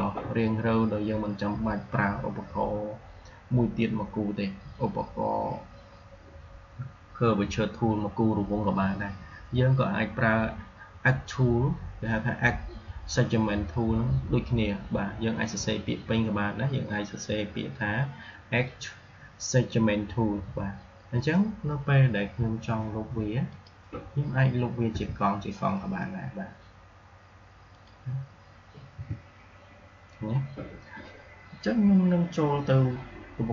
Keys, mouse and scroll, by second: 23.4 click, 24.8 Delete, 27.6 click, 28.8 Delete.